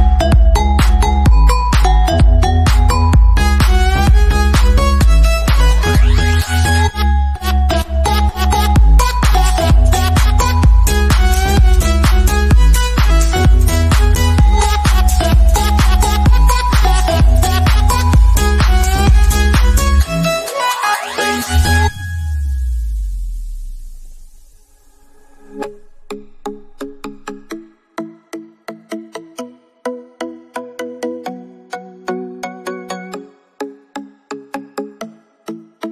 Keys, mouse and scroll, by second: 0.0-0.3 scroll down 1, 1.4 middle click, 2.4 scroll down 1, 5.4-7.3 drag, 7.3 scroll up 1, 8.4 ctrl+click, 9.1 scroll down 1, 10.2 click, 15.9 scroll down 1, 19.7 click, 22.7 click, 28.2 click, 29.2 scroll up 1, 33.0 click, 34.2-35.3 scroll down 1, 35.4 click.